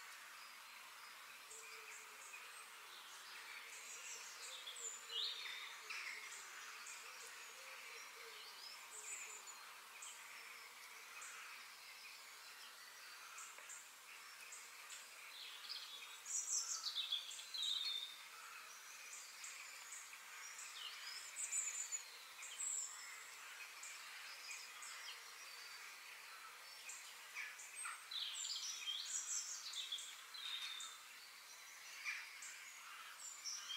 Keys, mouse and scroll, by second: 0.9 middle click, 1.7-2.0 scroll up 3, 2.0-3.2 shift+middle drag, 3.2-5.1 scroll down 1, 7.9-9.8 middle drag, 11.7-13.7 middle drag, 18.7 e, 23.1-24.9 middle drag, 29.1-29.5 scroll up 3, 29.5 shift+middle click, 30.1-32.0 scroll down 1.